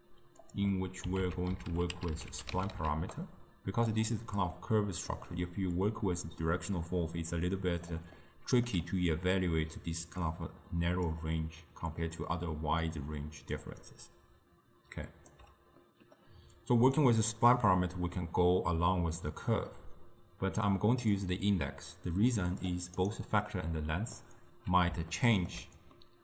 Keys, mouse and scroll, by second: 0.8 middle click, 1.3 ctrl+a, 4.6-5.3 middle drag, 5.3 d, 5.8 d, 5.8-7.9 drag, 7.9-9.4 typing, 8.3 middle click, 9.4-11.1 drag, 11.1-12.8 d, 13.0 click, 13.6 d, 13.7 d, 13.9-15.4 right drag, 15.4 d, 15.9-16.6 middle drag, 16.6-19.7 drag, 21.2-23.1 drag, 24.3-26.2 middle drag.